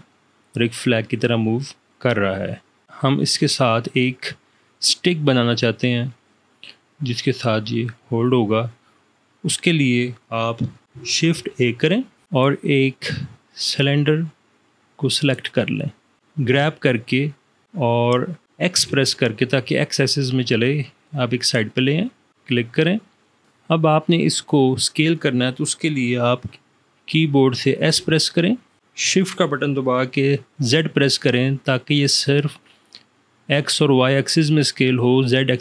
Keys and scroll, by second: 11.5 shift+a, 16.6 g, 19.0 x, 28.0 s, 30.8 shift+z.